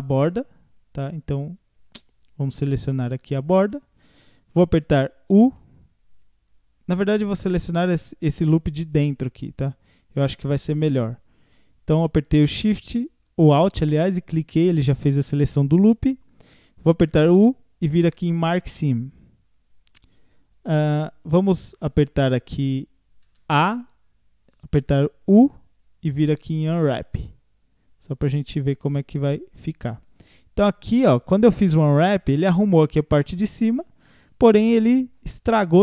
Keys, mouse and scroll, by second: 0.1 scroll down 2, 3.1 alt+shift+click, 5.5 u, 7.2 click, 7.9 alt+click, 9.6 scroll up 2, 9.9 scroll down 1, 10.4 scroll down 1, 17.3 u, 22.1 scroll down 5, 23.3 a, 25.3 u, 28.2 scroll down 2, 29.9-31.7 middle drag, 31.7 scroll up 1, 32.1-35.8 middle drag.